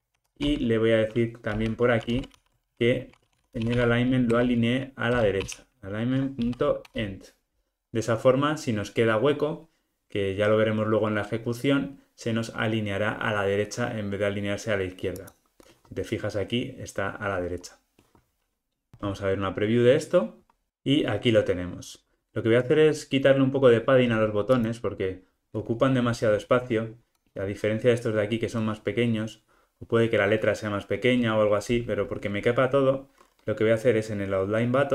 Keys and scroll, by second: 2.3 super+p, 4.3 Return.